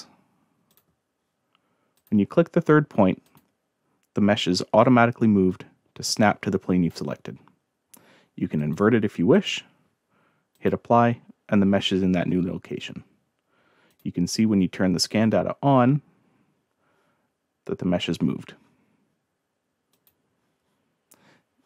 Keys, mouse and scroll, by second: 0.7 click, 2.0 click, 3.3 click, 4.7 middle click, 4.7-5.3 scroll down 2, 5.0 middle click, 5.5-6.9 drag, 8.6 click, 9.3 click, 10.5 click, 13.9 click, 15.2 scroll down 1, 15.3 middle click, 19.9 click.